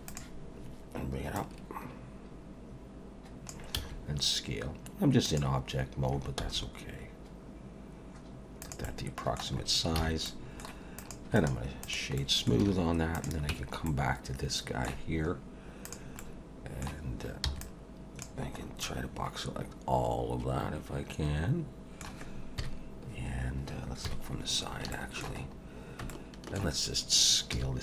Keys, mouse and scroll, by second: 1.4 click, 3.7 s, 6.4 s, 8.8 middle click, 9.6-9.9 scroll up 3, 10.0 alt+a, 10.2 middle click, 11.0 click, 11.4 right click, 12.2 middle click, 12.6 alt+a, 13.1 click, 13.5 Tab, 13.9 middle click, 15.9 click, 16.2 middle click, 17.4 b, 18.6 scroll up 3, 18.8 middle click, 22.6 KP_1, 24.0 KP_3, 24.9 shift+middle click, 25.4 scroll up 4, 26.1 shift+middle click, 27.5 s.